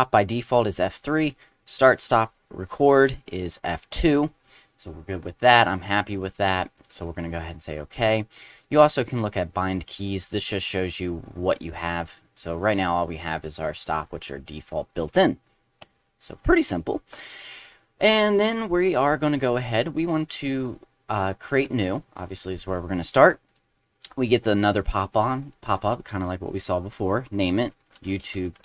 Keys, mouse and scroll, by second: 6.7 click, 8.5 click, 9.3 click, 15.8 click, 23.5 click, 25.4 click, 27.5-28.6 typing.